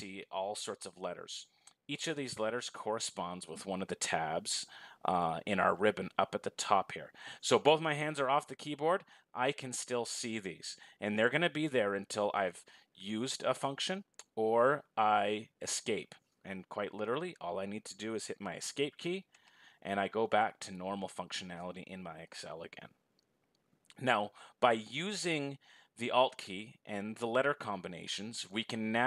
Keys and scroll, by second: 19.0 Escape.